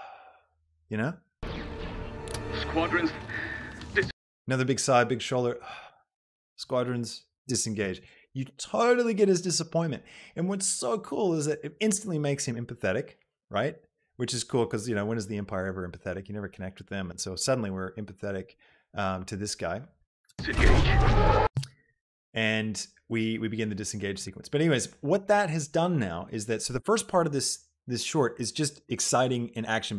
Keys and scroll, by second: 1.6 space, 4.2 space, 20.3 space.